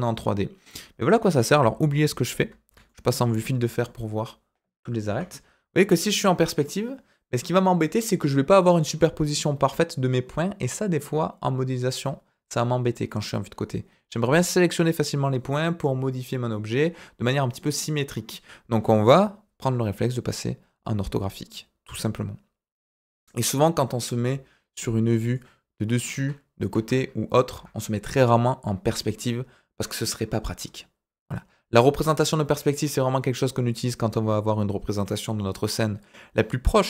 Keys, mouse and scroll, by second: 1.6 z, 2.8-3.2 shift+middle drag, 5.0 KP_5, 19.6 KP_5, 23.5 KP_7, 25.2 click, 26.1 KP_1, 26.7 KP_3.